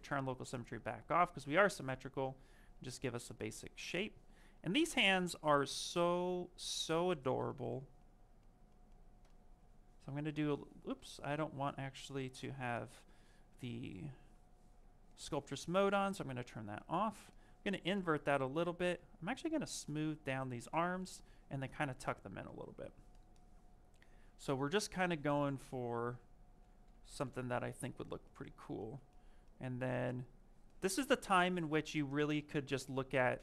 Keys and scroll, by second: 10.4 ctrl+z.